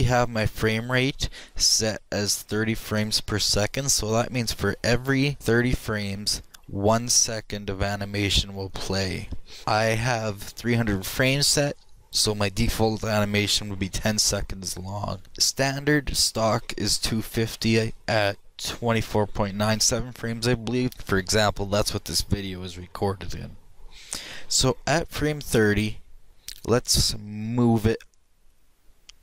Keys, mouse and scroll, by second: 3.0-4.8 drag, 5.4-7.3 drag, 27.4-29.2 drag.